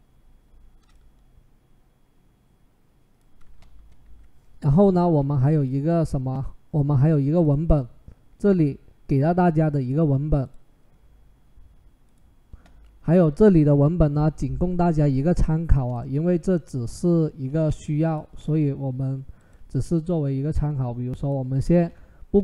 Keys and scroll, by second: 3.9 Left, 17.5 ctrl+c, 21.5 ctrl+v.